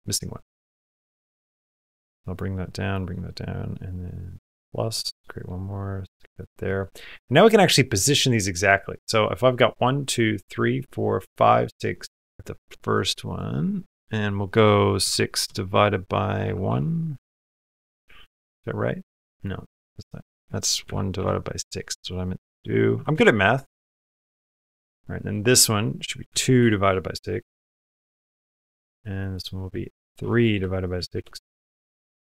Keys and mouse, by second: 0.6 click, 1.2 click, 2.0 click, 2.7 click, 5.1-6.2 drag, 12.4 click, 13.1 click, 13.8-16.5 drag, 19.2-23.0 drag, 25.1-27.4 drag, 28.7 click, 29.3-30.9 drag.